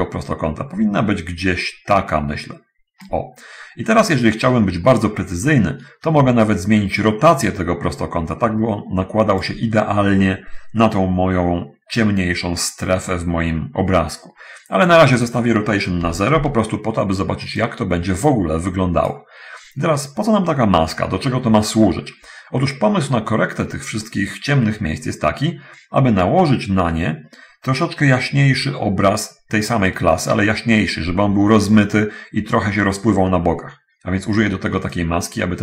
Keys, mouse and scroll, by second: 6.7-8.0 shift+drag, 8.0-9.2 shift+middle drag, 9.2 shift+click, 15.4 click, 16.0 0, 16.6 Return, 17.8-19.5 drag, 21.8-22.2 scroll down 1, 22.6 scroll down 1, 22.8-23.8 middle drag, 35.2-35.6 drag.